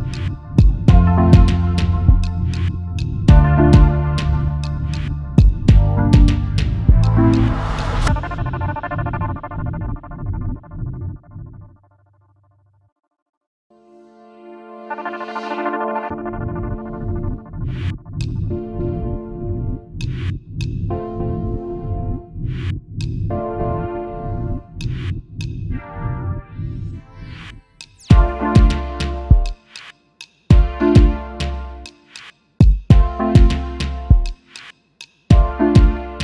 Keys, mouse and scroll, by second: 0.8 space, 0.8 double click, 1.4 alt+scroll down 2, 4.3 space, 4.3 double click, 9.1 alt+scroll up 1, 11.2 double click, 11.5 alt+scroll up 1, 12.6 right click, 14.6 double click, 14.9 alt+scroll down 1, 16.0 alt+scroll up 1, 16.9 right click, 17.8 double click, 18.1 alt+scroll up 1, 20.8 alt+scroll up 1, 23.4-23.9 scroll up 1, 24.9 alt+scroll up 1, 25.5 alt+scroll up 1, 30.2-31.0 alt+scroll down 1, 31.2 ctrl+z, 32.4 alt+scroll down 1, 35.0 double click, 35.2-35.7 alt+scroll down 1.